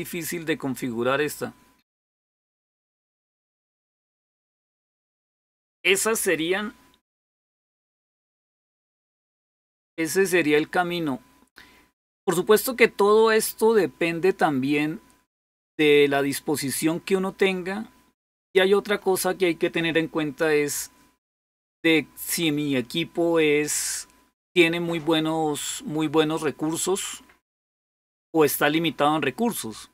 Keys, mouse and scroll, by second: 7.8-8.5 scroll up 1, 8.5 scroll up 1.